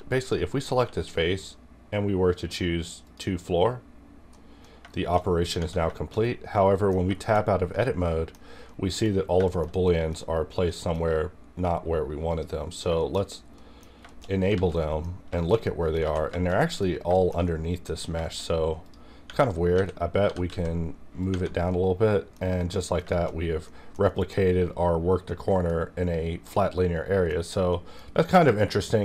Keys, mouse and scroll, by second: 0.1 click, 0.6 q, 3.0 click, 4.3 middle click, 4.4 middle click, 4.6-5.2 scroll down 2, 4.9 shift+middle click, 5.9 shift+middle click, 5.9 shift+middle click, 6.2 scroll up 1, 6.5 middle click, 6.9 scroll down 2, 7.2 shift+middle click, 7.2 shift+middle click, 7.4 scroll up 2, 7.5 scroll down 2, 7.7 middle click, 8.4 scroll down 2, 8.6 middle click, 10.1-10.7 scroll down 2, 10.7 middle click, 12.3 click, 12.7 scroll down 2, 13.0 shift+middle click, 13.2 scroll down 2, 13.5 middle click, 13.5 middle click, 13.8 scroll down 2, 14.0 shift+middle click, 14.1 shift+middle click, 14.2 shift+scroll up 3, 14.5 alt+z, 14.7 middle click, 15.0 scroll up 2, 15.3 shift+middle click, 16.0 alt+z, 16.3 shift+middle click, 16.5 scroll up 1, 16.6 middle click, 17.1 shift+middle click, 18.0 scroll down 1, 18.2 shift+middle click, 18.8 click, 19.3 Tab, 19.7 a, 20.2 g, 20.5 z, 21.2 click, 21.3 Tab, 21.7 middle click, 21.7 middle click, 22.4 scroll down 1, 22.7 middle click, 23.1 shift+middle click, 23.4 scroll up 1, 23.5 middle click, 24.1 middle click, 25.3-27.7 middle drag, 28.0-28.4 scroll down 1, 28.4 middle click, 28.5 scroll down 1.